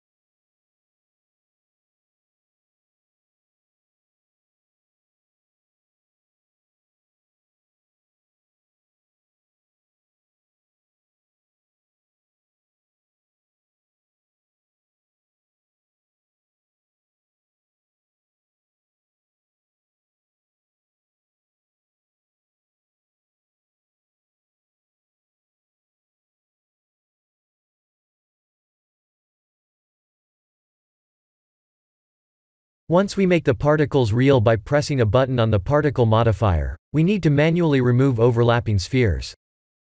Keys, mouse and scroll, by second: 0.6-1.1 middle drag, 1.9 click, 3.1 ctrl+a, 5.9-7.9 middle drag, 8.4 ctrl+z, 8.9-9.9 middle drag, 10.2 click, 11.6 click, 13.8-15.0 drag, 16.5-18.9 drag, 18.1 0, 20.0-26.9 drag, 25.8 0, 25.9 0, 29.3-32.7 middle drag, 34.1 KP_3, 34.3 KP_3, 36.6 click, 38.1-39.0 shift+middle drag, 39.4 shift+z.